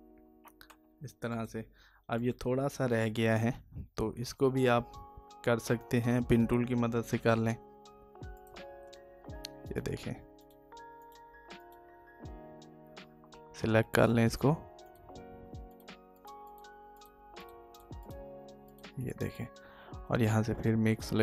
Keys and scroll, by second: 12.8 ctrl+alt+z.